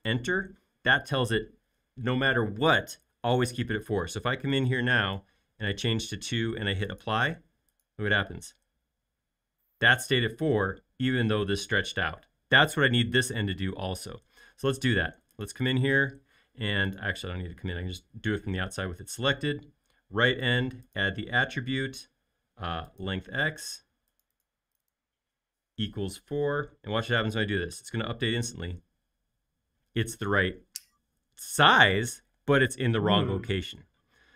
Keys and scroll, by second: 25.9-26.8 typing, 27.7 Return.